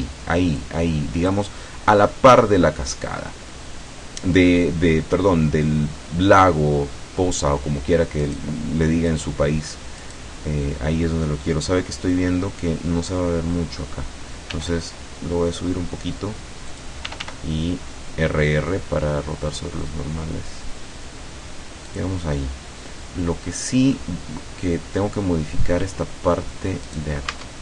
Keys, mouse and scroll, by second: 0.6 click, 8.2 right click, 9.1 right click, 10.0 right click, 14.6 g, 16.8 click, 17.1 r, 22.0 click, 24.0-26.6 middle drag, 27.0 right click, 27.4 Tab.